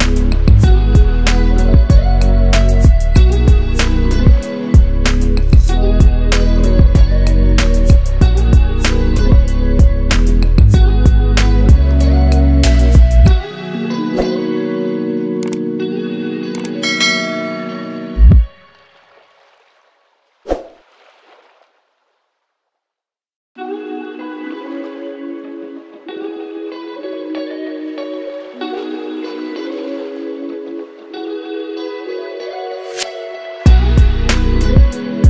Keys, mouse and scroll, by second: 0.5-1.1 drag, 7.5 scroll up 1, 8.5-8.9 click, 12.4-12.8 click, 12.9 scroll down 1, 13.5-15.5 drag, 16.7 scroll down 1, 17.3-23.3 drag, 30.3 scroll up 1, 30.7 space, 30.7 click, 31.5 ctrl+t, 32.0-32.4 alt+click, 32.6-33.0 click, 33.6 scroll down 1, 35.1-35.2 alt+shift+click.